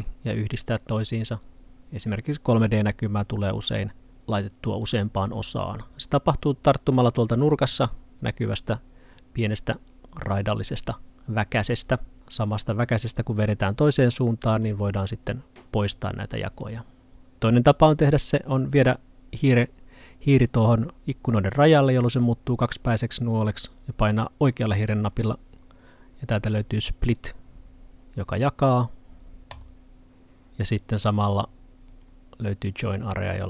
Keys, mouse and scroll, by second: 4.9 click, 13.2 click, 25.0 right click, 27.2 click, 31.9 right click, 32.9 click.